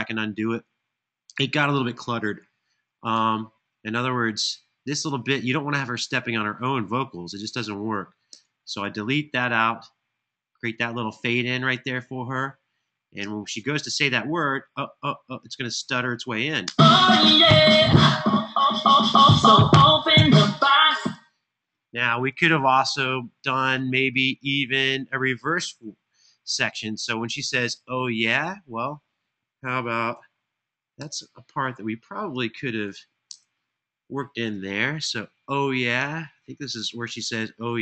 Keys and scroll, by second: 2.9 BackSpace, 8.1 BackSpace, 16.3 space, 20.7 space, 30.7 shift+super+n, 32.4 super+Right, 33.1 Return.